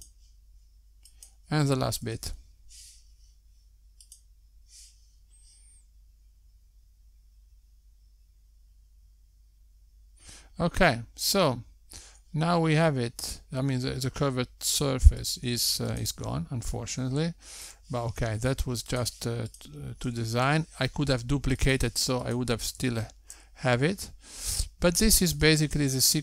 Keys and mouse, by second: 1.0 click, 1.8 l, 3.8 click, 11.7 Tab, 14.5 Tab, 15.2 click, 15.2 Tab, 15.6 click, 16.9 g, 19.3 click, 19.9 g, 22.0 click, 22.6 g.